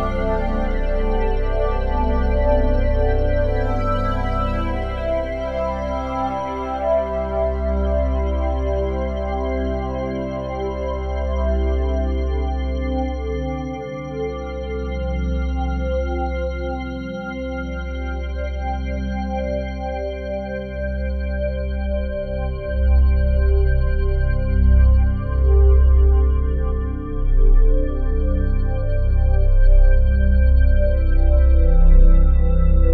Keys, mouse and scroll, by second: 0.6 click, 3.7 click, 4.7-5.6 ctrl+alt+drag, 7.4 alt+click, 10.4 alt+click, 17.6 typing, 18.3-21.3 drag, 26.9 Right, 27.8-30.0 ctrl+alt+drag, 30.0 Right, 30.1 Right, 31.0 Left.